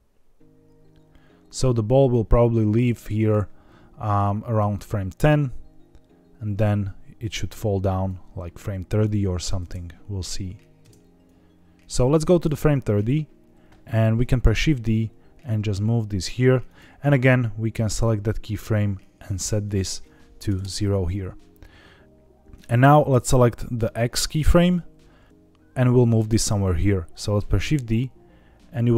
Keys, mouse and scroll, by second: 4.7-8.0 drag, 8.3 scroll down 3, 9.0-9.4 drag, 9.5 space, 10.7 space, 11.2-12.4 drag, 12.6-13.1 scroll up 5, 14.4 shift+d, 16.6 click, 17.9 click, 19.6 click, 23.7 click, 27.3 shift+d.